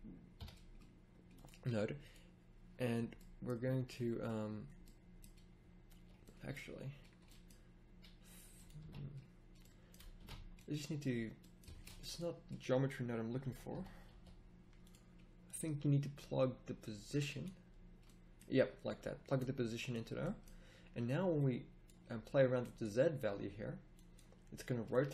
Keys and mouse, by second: 10.7 ctrl+z, 10.7 x, 11.6 a.